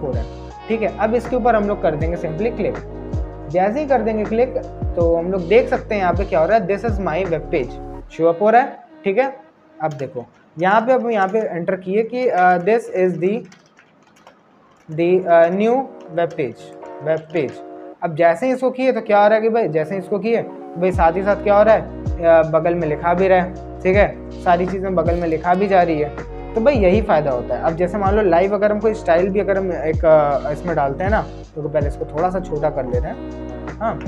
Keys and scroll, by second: 10.9 Return, 11.4-15.8 typing, 17.1-18.8 typing, 32.3 ctrl+-.